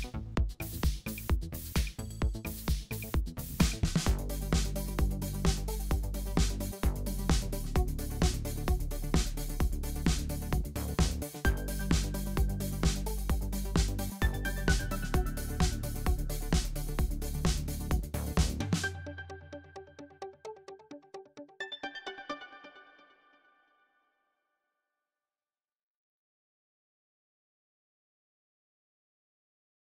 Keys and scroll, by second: 4.9 super+0, 5.5 super+a, 6.6 super+c, 7.4 super+f, 7.7 super+z, 8.4 super+a, 9.5 super+c, 10.3 super+f, 11.1 super+7, 11.3 super+7, 11.9 super+7, 12.8 super+7, 13.7 super+7, 14.0 super+7, 14.3 super+7, 14.5 super+7, 14.7 super+7, 15.6 super+0, 16.2 super+-, 16.4 super+=.